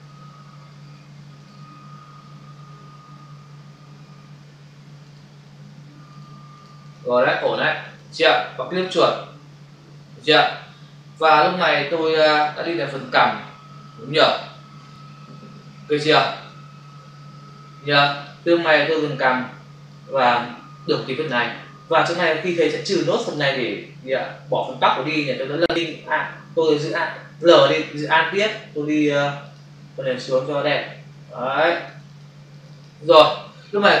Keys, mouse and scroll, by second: 1.4 click, 5.0 click, 6.0 click, 6.5 click, 6.6 double click, 6.8 click, 7.1 double click, 7.4 click, 7.7 click, 8.0 double click, 8.8 click, 8.9 double click, 10.7 ctrl+-, 18.0 ctrl+space, 18.1 ctrl+click, 18.3 ctrl+space, 18.9 space, 22.5 ctrl++, 23.1 space, 26.0 w, 27.4 l, 29.4 alt+click, 31.6 click, 31.8 click, 32.3 double click, 32.5 click, 32.7 click, 32.9 double click.